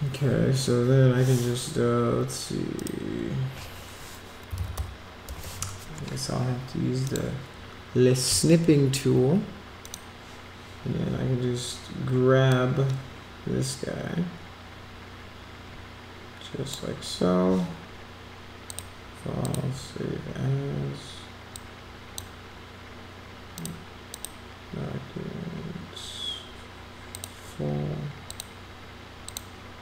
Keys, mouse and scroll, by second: 2.8 click, 4.3-5.4 typing, 7.0 click, 9.8 click, 12.5-16.7 drag, 18.7 click, 19.4 click, 21.5 click, 23.5 click, 24.1 click, 27.1 click, 28.3 click, 29.3 click.